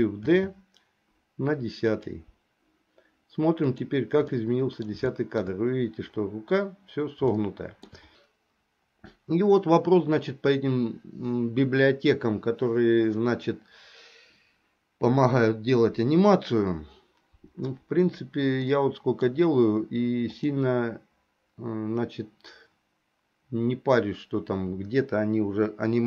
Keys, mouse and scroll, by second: 0.4 shift+d, 3.8 click, 4.5 middle click, 5.2 shift+middle click, 7.5 shift+middle click, 18.8 middle click, 20.5-26.0 drag.